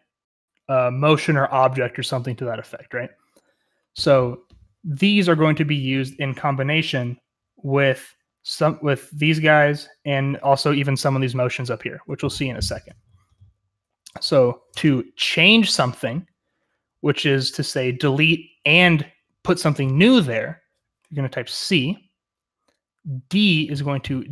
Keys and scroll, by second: 6.0-13.2 typing.